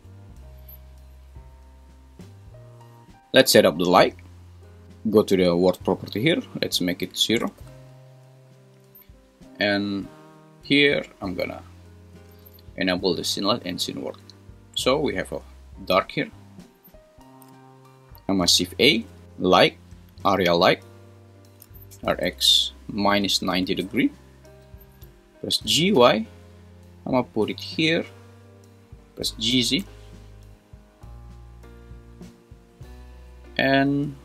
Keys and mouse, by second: 6.6-7.8 drag, 10.8-15.0 drag, 18.5 shift+a, 21.9 r, 22.1 x, 23.1 -, 23.4 9, 23.6 0, 23.9 Return, 25.5 g, 26.0 y, 29.2 g, 29.5 z, 31.4 click.